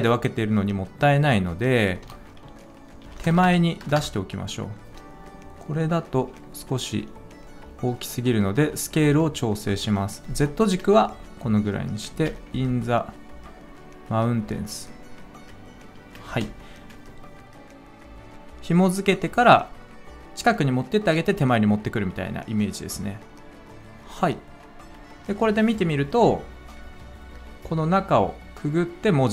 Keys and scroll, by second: 2.0 -, 3.2 0, 3.3 0, 3.8 0, 3.9 Return, 12.1 space, 16.2 space.